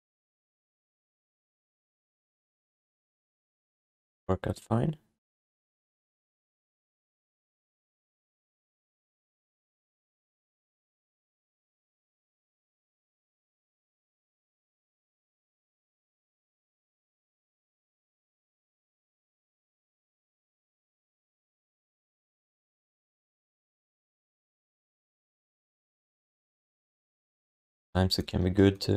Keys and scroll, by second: 3.3 1, 5.7 q, 6.7 alt+shift+d, 6.9 ctrl+s, 11.5 alt+w, 16.3-18.5 typing, 24.4 q, 27.3 w.